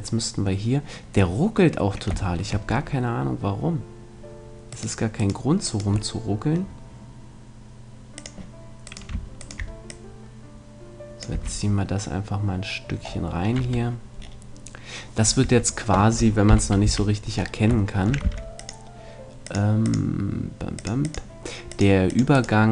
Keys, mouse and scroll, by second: 0.1 middle click, 0.2-1.3 drag, 2.3-4.7 middle drag, 4.7-7.5 right drag, 6.1 middle click, 8.1-11.5 drag, 8.9-11.1 right drag, 11.3 a, 13.6 Tab, 15.5 Tab, 16.5 KP_1, 16.9 KP_3, 17.3 middle click, 18.2 c, 22.4-22.7 right drag.